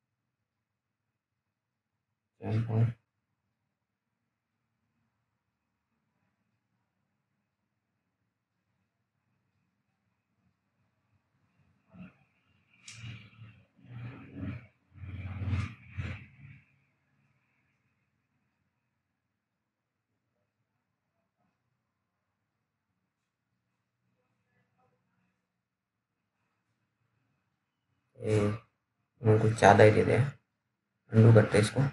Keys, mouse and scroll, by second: 3.1 click, 5.8-6.4 scroll up 1, 7.9 click, 10.5-11.7 scroll down 1, 13.0-13.6 scroll up 1, 13.6-14.8 scroll down 1, 14.8 click, 14.8 click, 20.6 right click, 21.5 click, 22.1 scroll down 1, 23.3 alt+middle click, 23.9-24.9 scroll up 1, 24.9-25.3 scroll down 1, 25.7 alt+middle click, 25.9-27.2 alt+scroll up 2, 27.2-27.7 scroll down 1, 28.0 middle click, 28.3-29.7 scroll up 1, 29.8 alt+middle click, 31.8 ctrl+z.